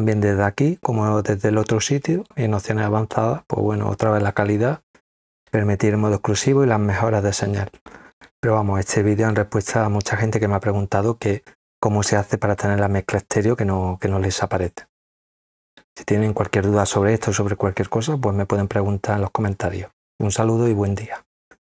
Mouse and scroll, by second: 2.1 click, 9.2 click.